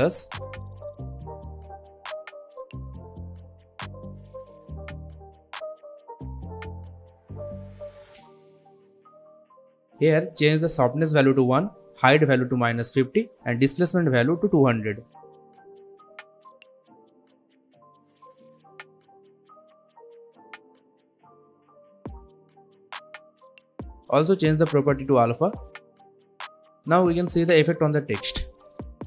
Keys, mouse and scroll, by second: 2.7-4.3 typing, 4.9 click, 6.9 scroll up 1, 9.9 click, 12.1 Return, 13.1 click, 14.4 Return, 15.7 click, 17.3 Return, 18.7-22.3 drag, 28.5-29.0 drag.